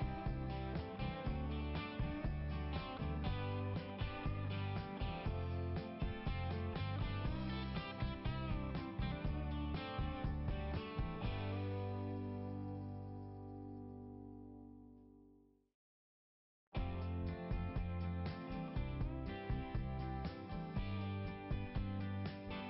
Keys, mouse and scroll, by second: 1.4 click, 1.5 click, 2.3 click, 3.9 click, 4.1 click, 9.1-10.1 scroll down 1, 11.4 click, 11.5 click, 14.1 click, 21.1 click.